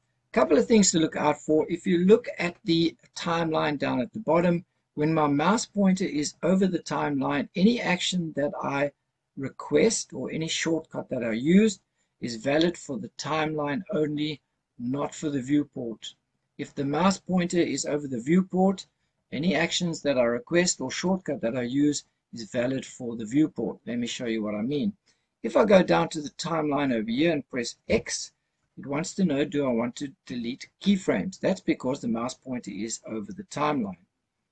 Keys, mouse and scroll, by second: 27.7 x.